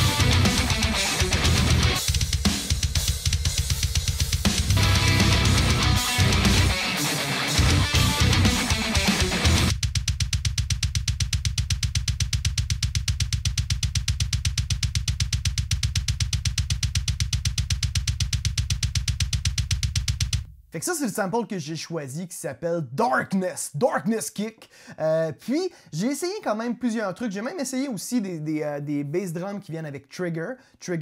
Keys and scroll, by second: 5.8 shift+super+g, 20.2 space.